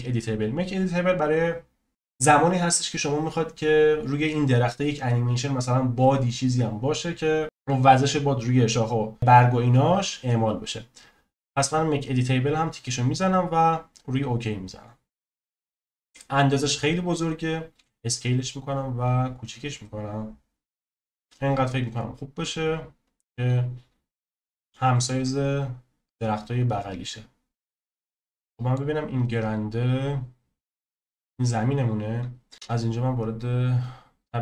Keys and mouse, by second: 17.7 s, 28.3-28.7 middle drag, 30.0 click, 32.5 KP_0, 32.8 click.